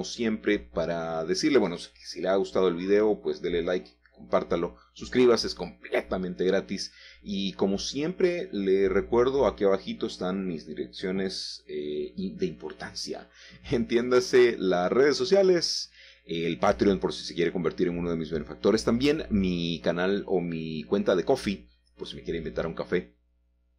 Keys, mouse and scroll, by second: 1.1 shift+click, 1.6-2.5 scroll down 2, 2.2 middle click, 2.7 shift+middle click, 3.4-6.5 middle drag, 3.4-4.6 scroll down 2, 5.4-6.5 scroll up 1, 6.5 typing, 7.0-9.2 drag, 9.2-9.8 typing, 10.8-13.8 drag, 14.8 scroll down 1, 15.2 shift+middle click, 16.7 middle click, 16.9 Tab, 17.8 click, 18.8 l, 20.9 l, 22.0 ctrl+z.